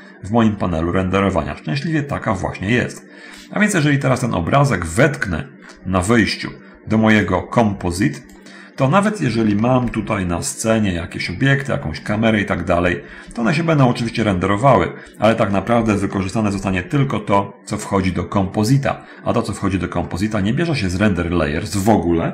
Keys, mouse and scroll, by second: 3.7 middle click, 5.7 scroll up 1, 7.4-8.7 drag, 9.9 shift+F5, 11.7 middle click, 12.7 shift+middle click, 13.3 scroll up 1, 16.7 shift+F3, 17.3 shift+middle click, 18.4-18.8 scroll up 1, 20.2 middle click, 21.7 middle click.